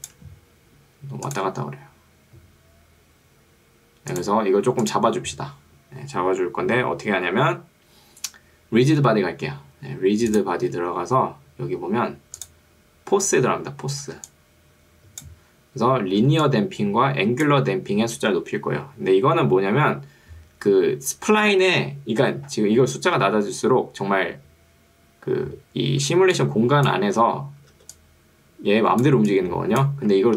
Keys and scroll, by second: 14.1 ctrl+2, 15.5 Escape, 16.3 ctrl+2, 17.7 Escape, 26.1 ctrl+2, 27.3 Escape, 27.9 ctrl+2, 30.1 Escape.